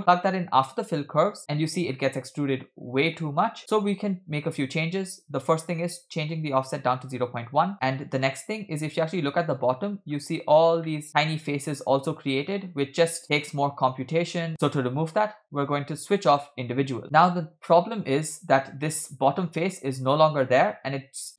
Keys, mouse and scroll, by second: 1.4-1.7 scroll down 3, 1.9-2.6 shift+middle drag, 3.2 middle click, 3.9-4.2 scroll up 3, 5.4-7.3 drag, 8.2-9.5 middle drag, 10.1-10.9 scroll up 5, 10.9 shift+middle drag, 11.1-11.4 scroll down 2, 16.2 click, 17.0-18.0 middle drag, 17.0-17.4 scroll down 3, 18.6-19.0 shift+middle drag, 19.0-19.8 scroll up 3.